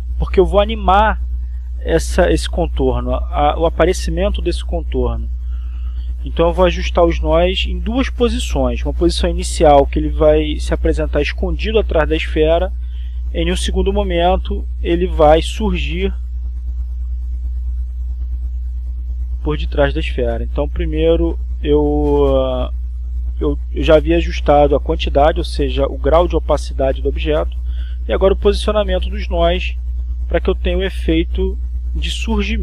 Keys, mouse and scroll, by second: 0.0 ctrl+z, 4.9 click, 6.2 click, 7.1 click, 8.4-10.5 drag, 10.8-12.5 drag, 12.9-14.2 drag, 15.9 click, 19.8-25.7 drag, 26.5 click, 29.9 click, 31.5-32.6 drag.